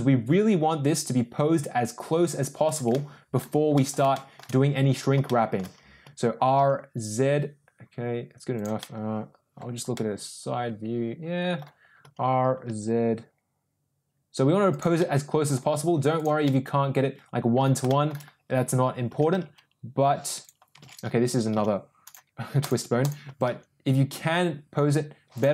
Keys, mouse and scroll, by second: 2.8 middle click, 3.7 middle click, 4.0 shift+middle click, 5.2 shift+middle click, 5.9 r, 8.7-9.6 middle drag, 9.8-11.6 middle drag, 11.9 r, 14.9 middle click, 16.2 click, 16.3-17.5 middle drag, 17.8 shift+middle click, 19.0 r, 21.1 ctrl+z, 21.5 g, 22.6 click, 23.2 r.